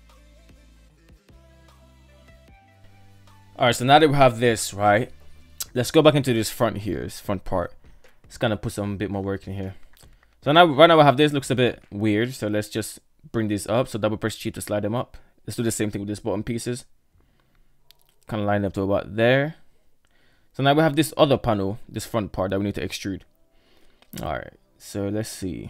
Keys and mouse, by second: 0.0-1.1 typing, 0.0 middle click, 0.1 Tab, 0.6 shift+middle click, 0.6 ctrl+right click, 0.9 Tab, 1.0 Tab, 1.2 right click, 1.2 shift+middle click, 1.4 shift+middle click, 2.2 KP_3, 2.9 shift+middle drag, 3.7-4.8 shift+middle drag, 6.4 shift+middle drag, 7.7 Tab, 9.3 alt+z, 10.2 right click, 11.2 shift+right click, 12.4 g, 14.5 right click, 14.8 shift+right click, 15.4 g, 22.2-23.3 shift+middle drag, 24.0 shift+middle click, 24.8 shift+middle click.